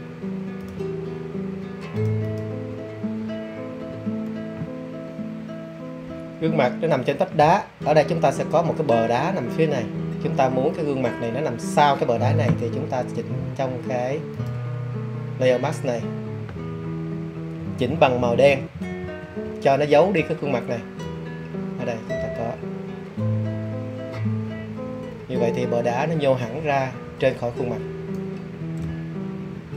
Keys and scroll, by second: 17.5 [, 17.8 [, 18.1 [, 18.3 [.